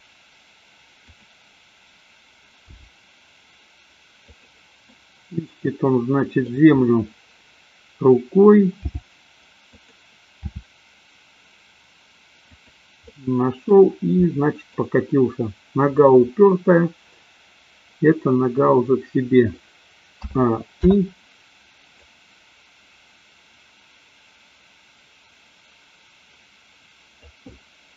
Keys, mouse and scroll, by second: 1.3 click, 2.9 g, 4.9-6.5 middle drag, 8.9 g, 9.9 click, 10.6 r, 13.0-13.8 middle drag, 14.3 middle click, 20.3 a, 20.9 i, 22.3-27.9 drag.